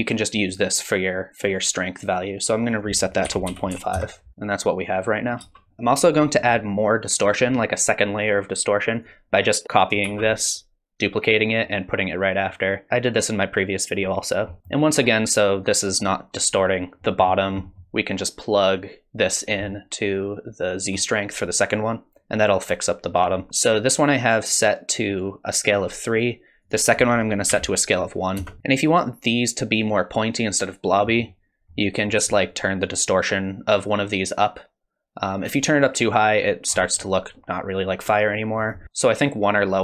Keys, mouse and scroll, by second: 2.7 click, 4.3 space, 5.4 space, 5.7 middle click, 5.7 scroll down 5, 7.4 scroll up 3, 9.0 click, 10.0 shift+d, 12.5 click, 14.5 middle click, 17.0 middle click, 17.4 scroll down 3, 17.6 middle click, 18.7 click, 23.3 scroll up 3, 23.5 middle click, 26.6 click, 31.2-32.3 scroll up 2, 32.3 scroll up 1, 32.5 shift+click, 38.6 click, 38.8 space.